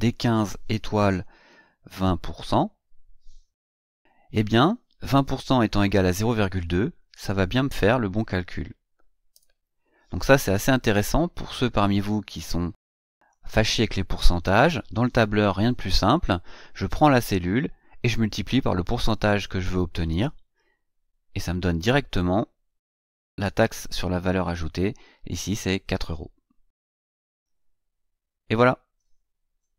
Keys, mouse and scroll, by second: 9.1 Return, 13.0 click.